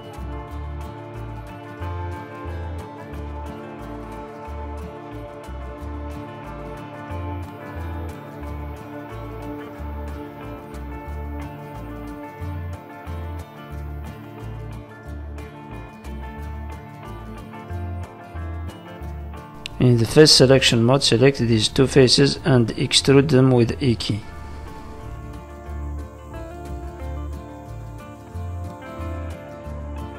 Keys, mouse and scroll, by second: 0.0 shift+click, 0.4 middle click, 0.7 shift+middle click, 1.4 shift+click, 2.3 click, 3.3 middle click, 5.0 shift+middle click, 5.4-5.8 scroll down 3, 5.8 shift+middle click, 6.2 scroll down 1, 6.7-7.8 scroll up 5, 7.0 shift+middle click, 7.8 shift+middle click, 9.2 middle click, 13.8 ctrl+z, 14.6 KP_3, 15.8 z, 17.0 middle click, 19.6 click, 20.6 middle click, 21.3 middle click, 21.8 shift+click, 22.4 middle click, 22.8 KP_3, 24.0 e, 24.8 click, 26.4 middle click, 27.4 z, 29.6 click.